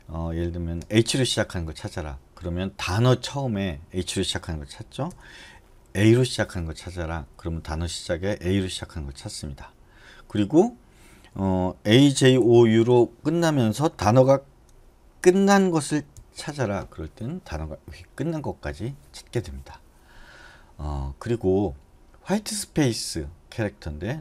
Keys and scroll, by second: 1.2 shift+h, 6.2 a, 12.1-13.5 typing, 15.2-16.3 typing.